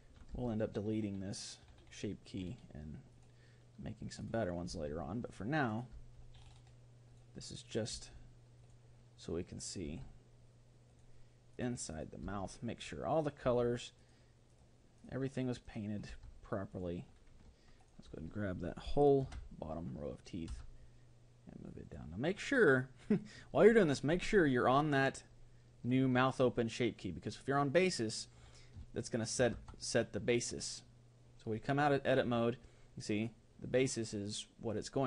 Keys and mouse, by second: 0.0-1.8 middle drag, 1.1 g, 4.3-7.3 right drag, 4.7 g, 6.9 g, 7.7-9.2 right drag, 7.9 g, 9.7-11.3 right drag, 11.1 g, 11.5-17.5 right drag, 12.3 g, 13.5 g, 16.1 g, 17.8-19.5 right drag, 19.2 ctrl+l, 20.5 g, 28.9-31.1 middle drag, 29.7 Tab, 33.2-34.7 drag.